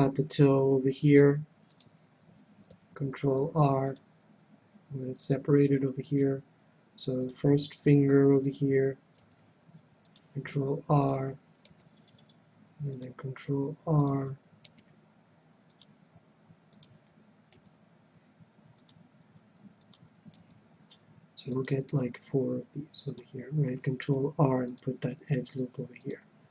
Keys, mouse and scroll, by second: 1.7-3.5 drag, 2.6 ctrl+r, 5.2-7.0 drag, 6.0 ctrl+r, 8.5-10.3 drag, 9.1 ctrl+r, 11.1-12.8 drag, 11.6 ctrl+r, 13.1 ctrl+r, 14.0-15.6 drag, 14.7 ctrl+r, 16.0 ctrl+r, 16.8-18.6 drag, 17.5 ctrl+r, 19.9-21.7 drag, 20.4 ctrl+r, 23.1-24.9 drag, 24.0 ctrl+r, 26.1-26.5 drag.